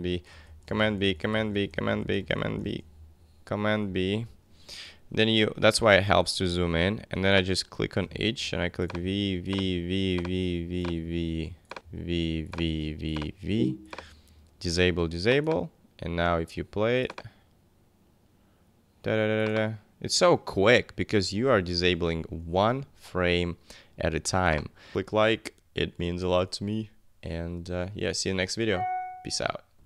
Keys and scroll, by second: 0.0 super+b, 0.1 super+Left, 0.3 super+b, 0.5 super+Left, 0.7 super+b, 0.8 super+Left, 1.1 super+b, 1.2 super+Left, 1.4 super+b, 1.5 super+Left, 1.8 super+b, 2.0 super+Left, 2.2 super+b, 2.4 super+Left, 2.7 super+b, 4.0 super+=, 8.0 v, 21.6 super+-.